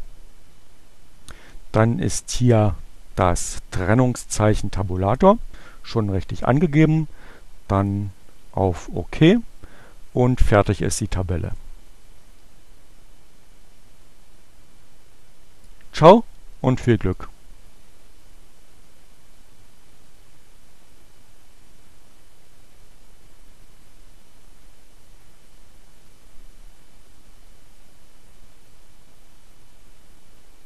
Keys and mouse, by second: 7.8 click, 10.3-11.7 drag.